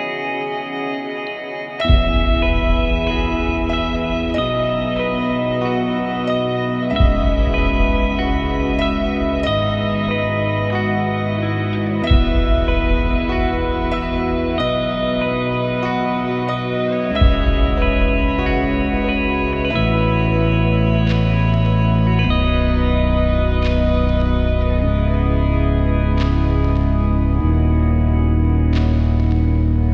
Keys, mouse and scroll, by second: 0.6 click, 3.2 click, 5.2 super+Tab, 6.6 super+Tab, 7.4 super+Tab, 8.0 super+Tab, 8.8 super+Tab, 9.4 super+Tab, 10.2 Tab, 13.0 click, 14.7 click, 16.2 click, 19.0 alt+F5, 20.0 alt+F5, 21.0 alt+F5, 21.8 alt+F5, 25.1 alt+F5, 26.3-27.6 alt+drag, 29.2 click.